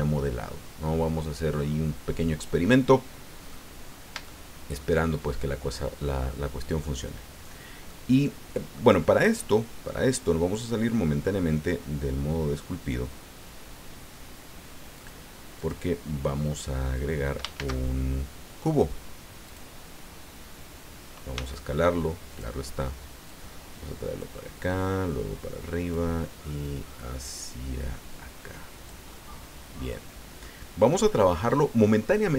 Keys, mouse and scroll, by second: 2.9 click, 3.8 scroll up 2, 4.3 shift+click, 5.4 click, 6.1-6.5 scroll up 2, 6.9 scroll down 2, 7.4 scroll down 2, 7.9-8.9 drag, 15.0 click, 15.6 click, 16.8-17.3 scroll up 2, 17.6 shift+a, 19.4 click, 21.3 s, 22.3 click, 23.2-24.4 drag, 24.8-26.1 drag, 26.6-29.0 drag, 29.1-30.6 middle drag, 31.2-32.3 drag.